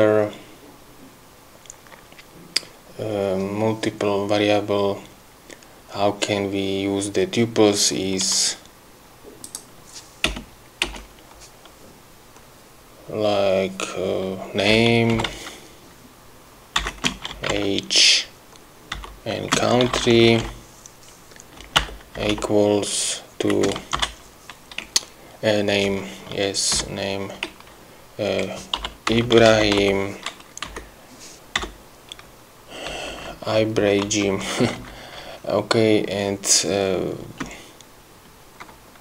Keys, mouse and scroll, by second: 9.7 click, 10.6 Return, 14.8-16.1 typing, 17.2-18.3 typing, 19.7-22.5 typing, 23.8 space, 28.9-30.6 typing, 31.0 Right, 33.2 Left, 34.4 Right, 37.5 space.